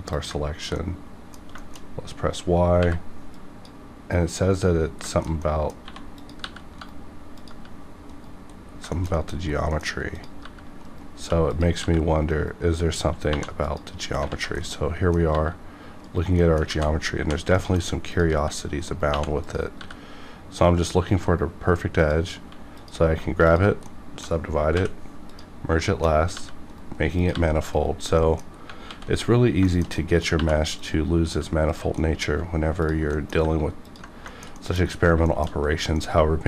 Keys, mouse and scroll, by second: 0.0 ctrl+click, 0.8 middle click, 1.6 shift+middle click, 1.8-2.8 shift+scroll up 2, 2.8 y, 3.2-5.0 drag, 5.1 shift+middle click, 5.4 middle click, 5.8 1, 6.2 click, 6.4 g, 6.8 right click, 7.3 click, 7.5 g, 8.0 right click, 8.5 scroll down 1, 8.9 shift+middle click, 9.3 middle click, 9.3 scroll up 1, 9.6 middle click, 10.1 click, 10.4 g, 10.8 right click, 11.1 2, 11.4 click, 11.8 g, 12.3 right click, 13.2 right click, 13.2 2, 13.5 click, 13.6 click, 14.3 alt+z, 14.6 middle click, 15.3 g, 16.3 middle click, 16.3 right click, 16.4 middle click, 16.7 alt+z, 17.2 1, 17.5 shift+middle click, 18.1 click, 18.3 g, 18.9 right click, 19.1 2, 19.4 click, 19.8 g, 20.7 right click, 22.1 click, 22.4 1, 22.8 click, 23.4 shift+click, 23.7 shift+click, 23.8 middle click, 24.7 m, 25.2 click, 25.8 middle click, 26.3 g, 26.7 right click, 27.2 click, 27.3 g, 27.7 right click, 27.7 right click, 28.2 middle click, 28.4 scroll down 1, 28.9 alt+x, 29.6 shift+middle click, 30.1 middle click, 30.3 2, 30.8 click, 31.7 ctrl+click, 32.0 middle click, 32.8 ctrl+click, 33.1 middle click, 33.8 ctrl+click, 34.3 shift+middle click, 34.5 middle click, 35.3 shift+middle click, 35.6 scroll up 1, 35.9-36.4 middle drag.